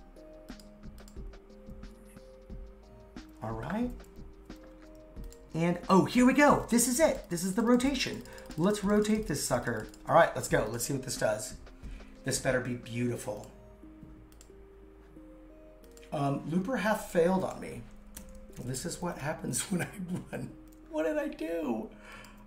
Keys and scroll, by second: 18.2 super+/.